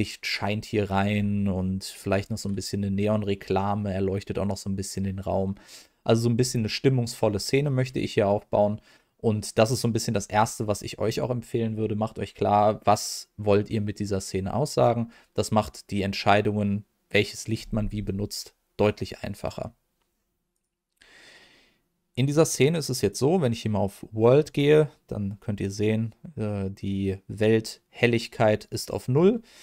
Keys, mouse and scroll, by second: 20.5-26.1 drag.